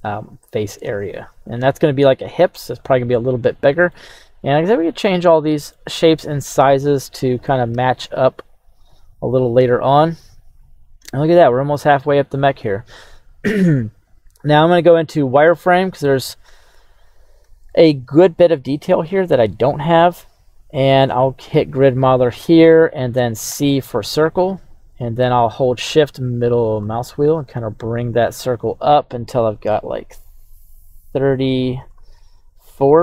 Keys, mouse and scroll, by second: 2.6 click, 3.4 middle click, 4.0-4.4 scroll down 2, 4.4-5.7 middle drag, 7.0 middle click, 7.7 KP_3, 8.8 click, 9.1 scroll down 2, 10.0 scroll up 4, 11.1 shift+middle click, 14.7 z, 15.5 shift+middle click, 17.0-17.4 scroll up 2, 17.7 shift+middle click.